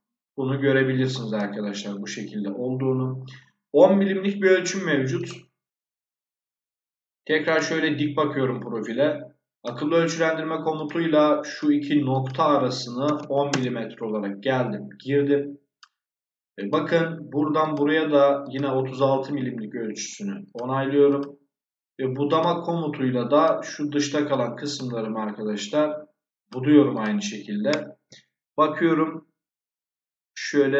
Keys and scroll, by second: 12.9 1, 13.4 Return.